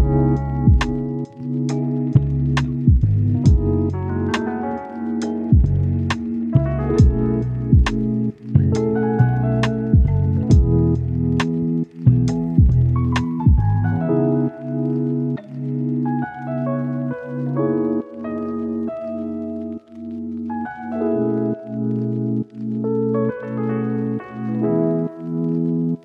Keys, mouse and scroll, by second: 0.0-0.7 scroll up 1, 0.7 click, 4.1 right click, 5.3 click, 11.2-13.3 right drag, 13.3 scroll down 1, 13.5-15.6 scroll up 1, 15.6 scroll down 1, 15.7 scroll up 1, 15.9 click, 16.1-18.7 right drag, 18.7 scroll up 1, 18.9 right click, 19.2 scroll down 1, 19.3 scroll up 1, 19.4 right click, 19.9 scroll down 1, 20.1 scroll up 1, 20.2 right click, 21.1-21.5 scroll up 1, 21.5 click, 21.6 scroll down 1, 21.7 scroll up 1, 21.8 right click, 22.4 click, 23.7 right click, 23.9 scroll down 1, 24.1 right click, 25.1-25.5 scroll up 1, 25.5 click, 25.7 right click.